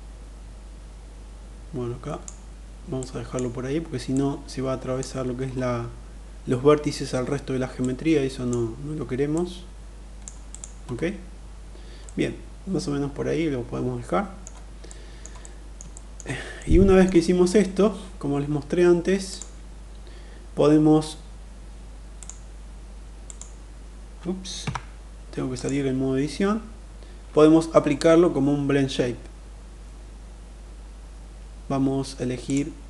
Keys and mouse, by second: 2.3 click, 3.5 click, 7.1 click, 8.7 click, 11.3-13.9 middle drag, 14.3 middle click, 14.8 middle click, 15.4 shift+middle click, 16.0 middle click, 18.6 click, 21.6 click, 22.7 click, 24.0 Tab, 24.9 click, 31.7-32.8 drag.